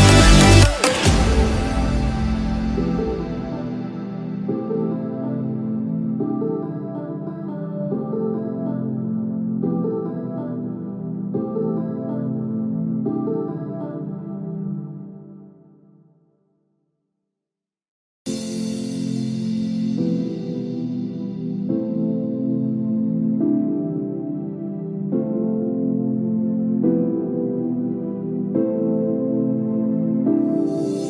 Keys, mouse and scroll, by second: 0.9-1.6 scroll down 6, 1.6-1.9 scroll up 1, 3.1 scroll up 1, 3.1 g, 6.3 scroll down 3, 7.5 KP_1, 8.2-8.8 scroll down 3, 9.0 shift+middle click, 9.4-10.5 scroll up 6, 10.6 scroll up 3, 12.5 shift+click, 12.9-13.8 scroll down 2, 13.9 g, 21.4-22.3 scroll down 4, 22.5 middle click, 23.2 scroll up 2, 24.6 shift+click, 24.6 scroll up 4, 25.4 scroll down 1, 27.9 ctrl+p, 28.4-28.9 scroll down 4.